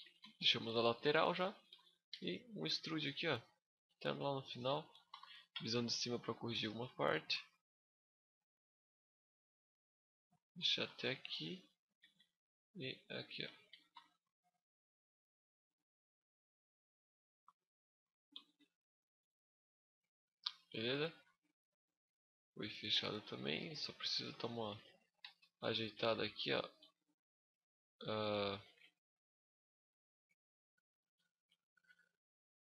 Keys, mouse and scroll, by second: 0.4 KP_5, 1.1 shift+scroll up 1, 1.2 shift+middle click, 1.9 e, 2.2 right click, 2.5 g, 4.4 shift+click, 4.9 KP_7, 5.6 scroll up 3, 6.8 g, 10.3 shift+click, 11.1 right click, 11.7 g, 13.2 shift+click, 13.7 KP_1, 14.5 scroll up 5, 15.4 click, 17.3 scroll down 5, 17.5 z, 17.7 middle click, 18.1 Tab, 18.7 KP_5, 19.8 middle click, 21.3 scroll up 1, 21.5 middle click, 22.7 z, 22.9 scroll up 1, 23.0 middle click, 23.4 a, 23.9 Tab, 24.6 alt+right click, 24.9 z, 25.4 middle click, 25.7 z, 27.3 middle click, 28.2 alt+right click, 28.6 middle click, 29.5 alt+right click, 30.2 scroll down 2, 30.4 middle click, 31.2 z, 31.5 scroll up 1, 32.1 click.